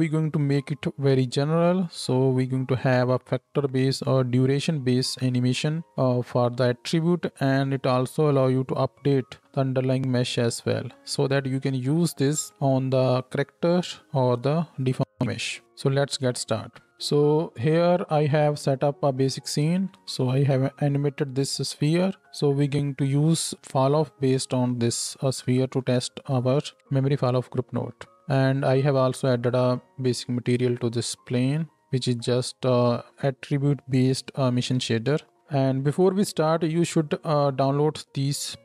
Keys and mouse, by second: 16.4 space, 19.6 space, 28.2 space, 31.0-31.8 drag, 31.8-33.1 middle drag, 33.1-35.4 drag, 35.4-38.6 middle drag, 36.8 shift+a.